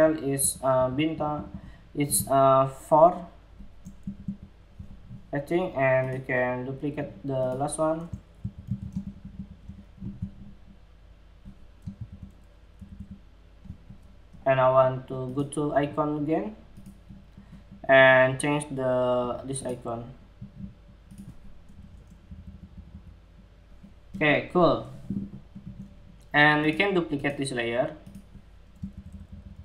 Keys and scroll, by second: 3.5 alt+Right, 3.8 alt+Right, 7.9 super+c, 8.2 super+v, 11.5 alt+shift+Left, 12.3 alt+Left, 12.5 alt+Left.